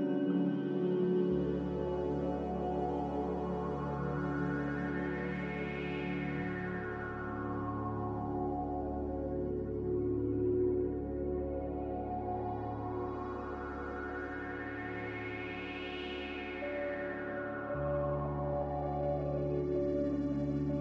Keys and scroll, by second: 1.6 Return, 4.4-5.1 typing, 7.7 x, 8.7 ctrl+z, 13.5-14.7 typing, 16.4-17.2 typing, 20.5 x.